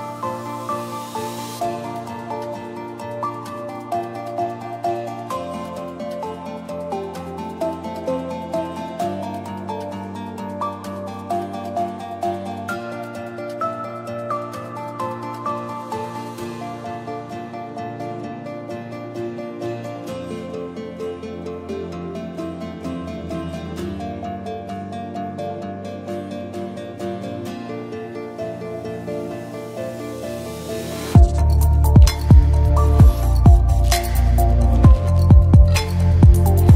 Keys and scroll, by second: 0.6 ctrl+a, 1.1 s, 2.3 ctrl+a, 3.3 space, 4.9 o, 5.3 BackSpace, 14.1 space.